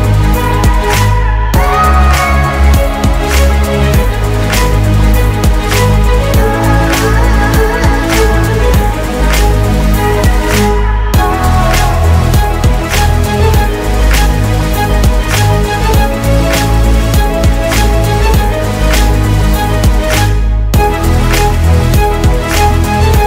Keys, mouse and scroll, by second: 11.6 shift+Page_Down, 17.4-18.3 typing, 18.5 Return.